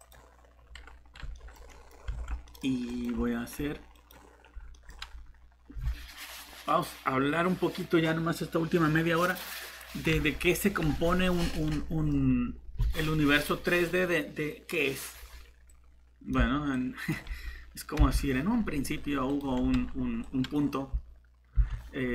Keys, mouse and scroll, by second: 1.3 middle click, 2.1 Tab, 2.9 click, 4.7 middle click, 10.6 scroll up 1, 11.1 middle click, 15.7 click, 18.0 shift+Delete, 21.5 7.